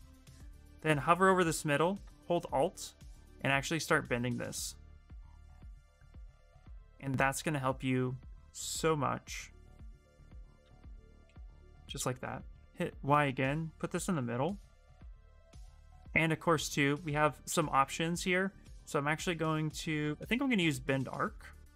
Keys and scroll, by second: 12.3 ctrl+y.